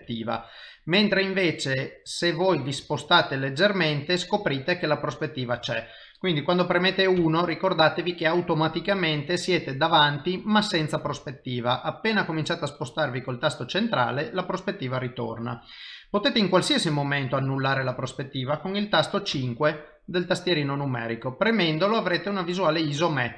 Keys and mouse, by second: 1.9 middle click, 7.2 KP_1, 11.7 middle click, 16.4 middle click, 19.3 KP_5, 20.4 middle click.